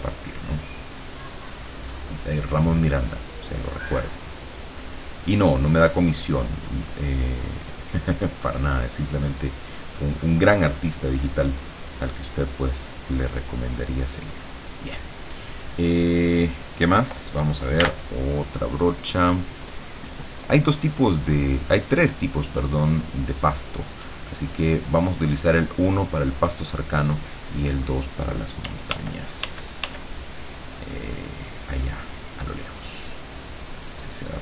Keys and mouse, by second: 3.5-15.0 drag, 17.8 b, 19.7-22.0 drag, 26.1 click, 28.7 d, 30.2-34.4 drag.